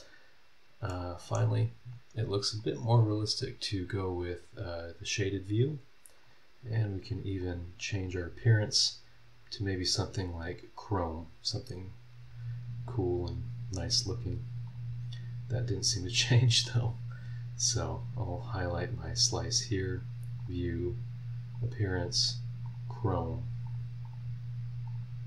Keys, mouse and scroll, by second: 0.4 scroll down 2, 0.9 middle click, 2.6 click, 4.2 click, 6.2 click, 7.4 click, 8.7 click, 10.4 click, 14.6 click, 16.6 scroll up 1, 17.6 scroll down 2, 18.4 click, 20.4 click, 21.5 click, 22.6 click, 23.1 click, 23.6 click, 24.0 click, 24.8 click.